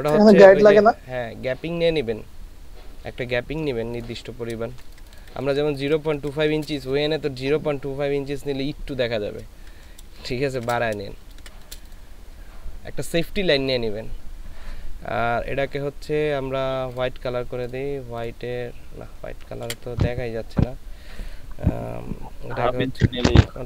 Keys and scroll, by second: 4.8 ctrl+space, 10.3 ctrl+space, 11.1 ctrl+space, 19.8 ctrl+z.